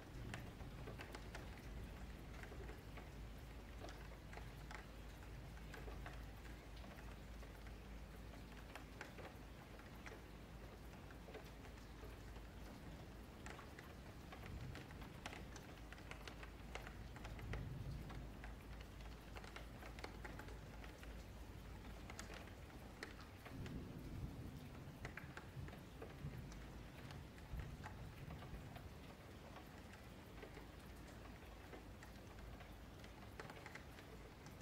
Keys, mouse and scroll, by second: 0.8-1.1 scroll down 1, 1.1 middle click, 1.3-2.1 scroll down 2, 2.1 click, 2.6 shift+click, 4.2 click, 4.7 shift+click, 5.4 click, 5.8 shift+click, 6.5 click, 6.9 shift+click, 7.5 click, 8.1 shift+click, 8.7-10.2 middle drag, 10.2 ctrl+z, 12.9 click, 13.6 shift+click, 15.9 click, 16.7 shift+click, 18.0 click, 18.7 shift+click, 19.7 click, 20.4 shift+click, 21.0-22.5 middle drag, 22.5 click, 23.1 shift+click, 23.7 click, 24.1 shift+click, 24.9 click, 25.4 shift+click, 26.3 middle click, 26.6 Tab, 27.2 Tab, 28.0 click, 28.8 ctrl+click, 29.5 ctrl+click, 30.4 ctrl+click, 30.9 ctrl+click, 31.6 ctrl+click, 31.9 ctrl+click, 32.2 ctrl+click, 32.6 middle click, 32.9-33.7 scroll up 2, 33.7 e.